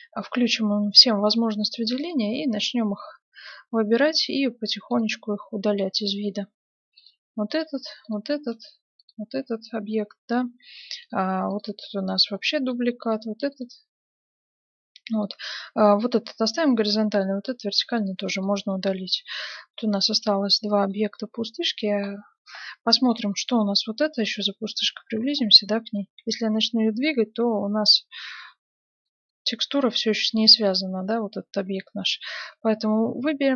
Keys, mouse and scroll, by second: 2.7 right click, 3.7 right click, 4.4 x, 6.2-10.1 right drag, 6.6 x, 7.7 x, 8.7 x, 11.0-12.6 right drag, 11.2 x, 12.4-14.2 middle drag, 13.1-14.8 right drag, 13.3 x, 15.2-17.0 middle drag, 16.8-18.4 right drag, 17.2-20.1 middle drag, 17.6 x, 20.4-23.6 middle drag, 23.6-25.2 right drag, 24.7 KP_Decimal, 25.4-27.4 middle drag, 26.1 g, 29.0-30.8 middle drag, 30.8-32.3 right drag.